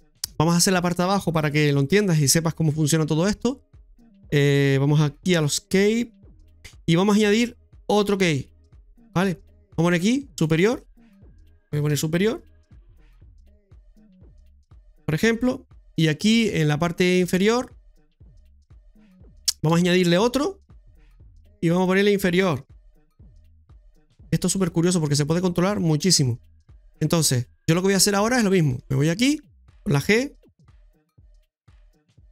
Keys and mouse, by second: 5.3 click, 10.4-15.4 drag, 17.3 Tab, 19.6 Tab, 20.6 click, 21.9-24.0 drag, 24.6 shift+middle click, 25.0 middle click, 25.8 shift+middle click, 26.8 middle click, 28.7 Tab, 30.7 g.